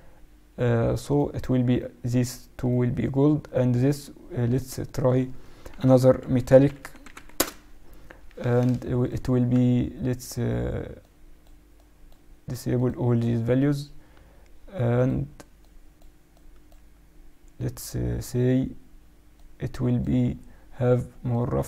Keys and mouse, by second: 1.0-5.2 right drag, 4.4-6.6 drag, 5.2-6.3 middle drag, 6.7 l, 9.0-10.7 drag, 13.5-15.4 drag, 19.3-21.0 drag.